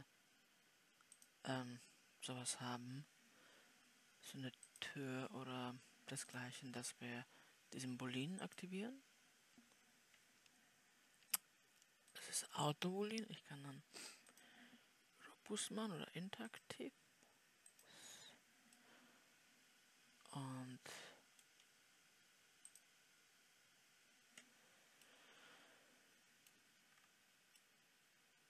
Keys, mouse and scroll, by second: 27.3-28.0 scroll down 3, 28.0-28.4 middle drag.